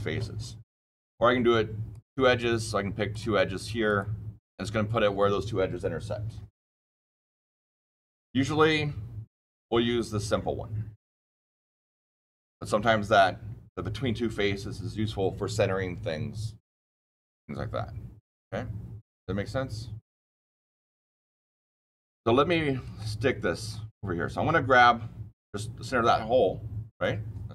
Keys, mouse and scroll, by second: 1.8 click, 3.0 click, 3.8 click, 9.2 click, 21.8-22.7 scroll down 2, 22.7 scroll down 1, 22.9-23.6 shift+middle click, 23.2 shift+middle click, 24.2-27.2 scroll down 2, 27.2 scroll down 1.